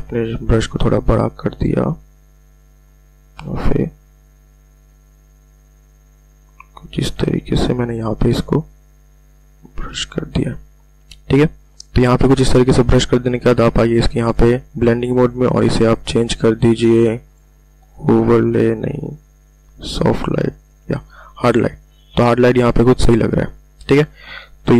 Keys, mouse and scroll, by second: 0.3-0.7 ctrl+alt+scroll down 1, 1.6 ], 1.9 ], 2.5 click, 7.9 [, 8.1 [, 9.3 click, 10.3-10.6 ctrl+alt+scroll up 1, 14.2 click, 17.3 click, 18.8-19.9 scroll down 1.